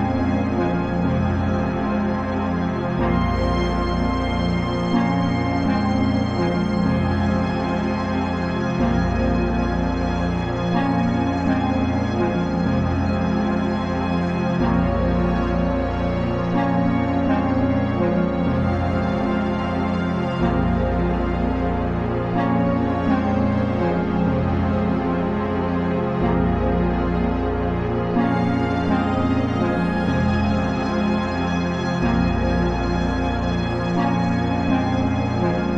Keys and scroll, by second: 16.5 ctrl+j.